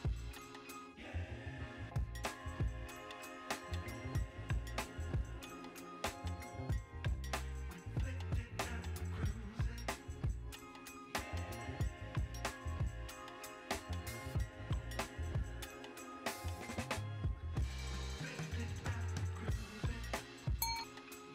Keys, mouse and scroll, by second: 7.1 click, 7.5 shift+middle click, 8.4 click, 8.9 click, 9.3-11.0 drag, 12.1 click, 13.1 click, 13.4 l, 16.2 click, 20.0 typing.